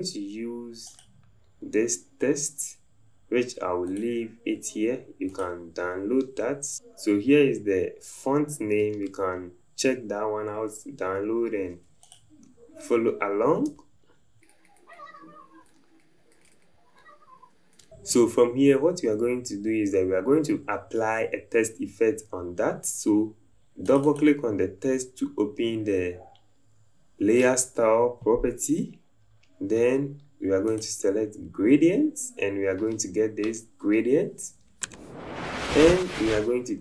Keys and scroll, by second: 6.7 `, 11.1 typing, 13.7 v.